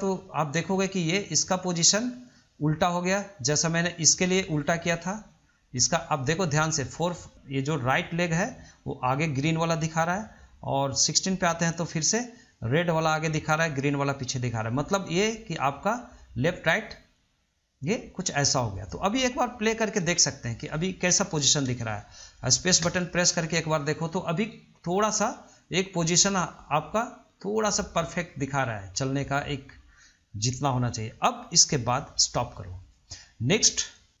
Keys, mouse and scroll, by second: 0.9-3.9 drag, 10.6-13.6 drag, 15.9-18.9 drag, 20.2-22.9 middle drag, 22.9 space, 24.7-30.5 middle drag, 32.5-34.2 drag.